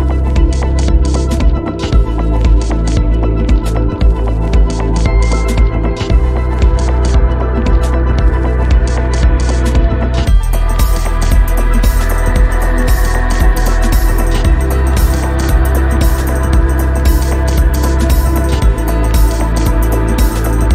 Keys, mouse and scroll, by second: 0.0 ctrl+t, 0.5 click, 1.3 click, 2.0 click, 7.2 click, 8.8 click, 9.8 scroll up 2, 10.5 scroll down 2, 10.7 scroll up 1, 11.0 alt+middle click, 12.4 click, 15.0 scroll down 2, 15.3 shift+middle click, 15.6 click, 16.6 shift+middle click, 17.0 click, 19.1 middle click, 19.8 shift+middle click.